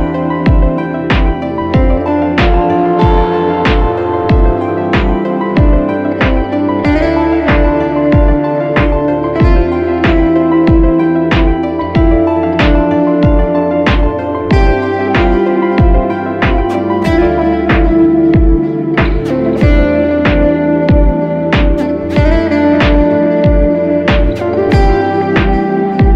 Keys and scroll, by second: 19.9 super+-, 20.4 super+-, 20.8 super+=.